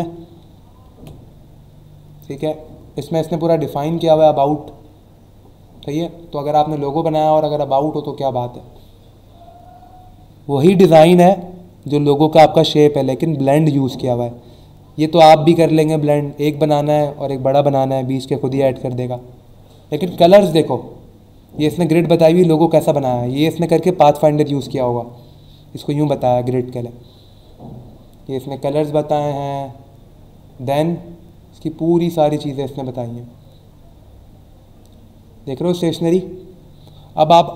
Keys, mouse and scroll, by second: 0.0-0.4 ctrl+scroll up 1, 0.8-1.4 ctrl+scroll up 2, 2.6 scroll down 1, 3.2 scroll down 1, 6.8-7.4 scroll down 2, 8.2 scroll down 1, 8.9 scroll down 1, 19.1-20.2 scroll down 3, 21.0 scroll down 1, 26.6-28.4 scroll down 5, 28.9-29.9 scroll down 3, 30.6-31.3 scroll down 2, 32.4 scroll down 1, 33.0-33.7 scroll down 2, 34.1 scroll down 1, 35.0 scroll up 1, 35.6 scroll down 1.